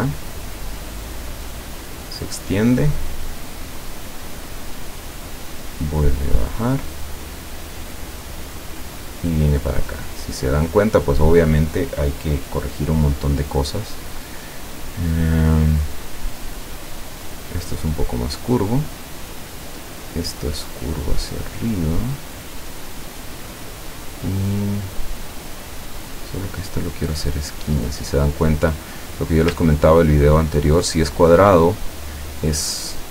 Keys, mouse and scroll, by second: 0.4 click, 4.3 click, 8.3 click, 10.5 click, 13.9 click, 17.8-18.8 drag, 20.3-23.1 drag, 26.2 click, 28.1 click, 29.8-30.4 ctrl+scroll up 2, 31.6 click.